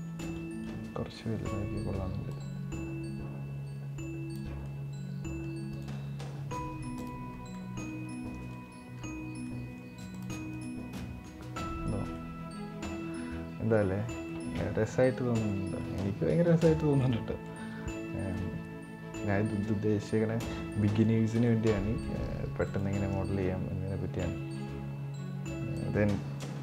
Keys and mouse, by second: 0.1 middle click, 2.1-4.2 drag, 4.5 middle click, 6.1-6.7 middle drag, 6.9 click, 7.3-7.9 middle drag, 8.4-8.8 middle drag, 9.2-9.6 middle drag, 9.9 click, 10.3 right click, 11.1-11.6 middle drag, 12.1-13.8 middle drag, 14.1-15.3 middle drag, 15.6-16.4 middle drag, 16.8 middle click, 18.3-19.5 middle drag, 19.9-20.8 middle drag, 21.2-21.9 middle drag, 25.6 click.